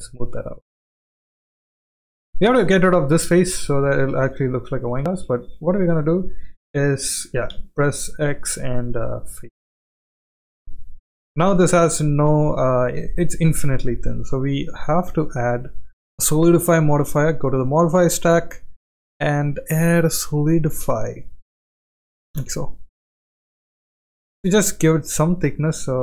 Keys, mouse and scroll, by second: 0.6-0.9 middle drag, 1.8-2.1 middle drag, 2.5 shift+middle click, 3.2 click, 3.8 Tab, 4.7 3, 5.0 click, 7.5 x, 9.7 click, 10.1 middle click, 10.9 shift+middle click, 11.9 Tab, 13.1-13.8 middle drag, 15.9-21.8 drag, 22.9-24.5 drag, 25.3-25.7 middle drag.